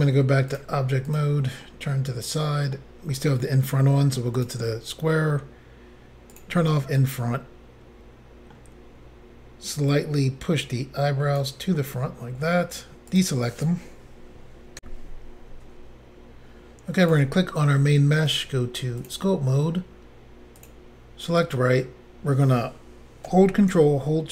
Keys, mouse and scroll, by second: 0.5 click, 1.1 click, 1.2 click, 1.7 middle click, 4.4 click, 5.2 scroll down 4, 6.4 click, 7.0 middle click, 9.9 click, 11.8 middle click, 13.1 click, 13.2 click, 14.8 Insert, 17.1 click, 18.3 click, 18.4 click, 19.0 click, 19.1 click, 20.6 click, 20.7 click.